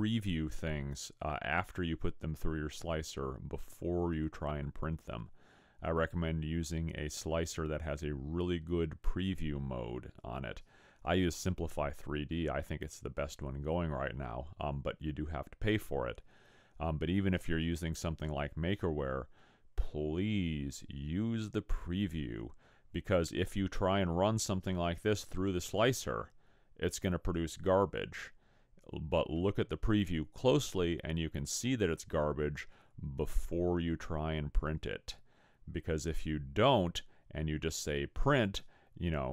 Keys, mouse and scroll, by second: 27.2 scroll up 3, 29.6 middle click, 35.2 middle click, 37.5 middle click.